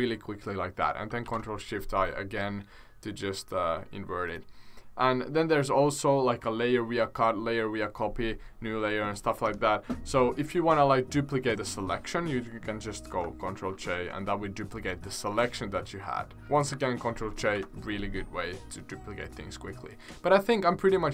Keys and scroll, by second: 1.2 ctrl+shift+i, 13.6 ctrl+j, 17.5 Delete.